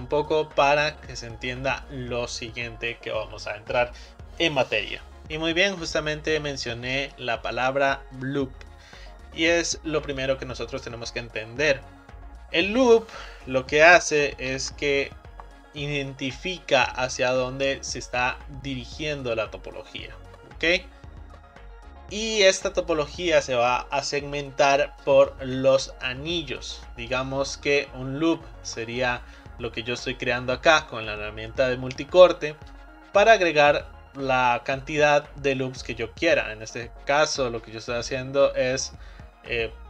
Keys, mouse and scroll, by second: 1.5 right click, 14.5 ctrl+r, 14.5-39.8 right drag.